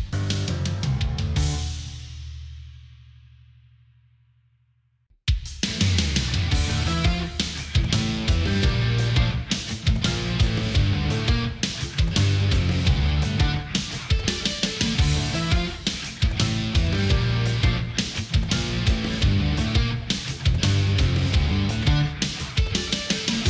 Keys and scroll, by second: 11.0 ctrl+=, 12.6 space, 13.4 space, 14.3 ctrl+z.